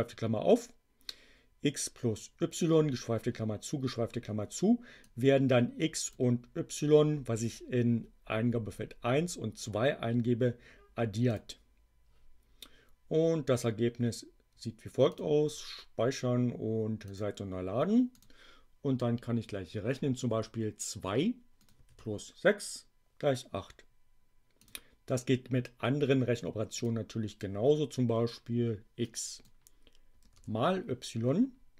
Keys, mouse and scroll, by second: 4.9-6.2 drag, 11.2 click, 15.0 click, 17.1 click, 18.1 click, 20.2 2, 21.5 click, 21.8 6, 24.7 click, 26.7 click, 29.0 click.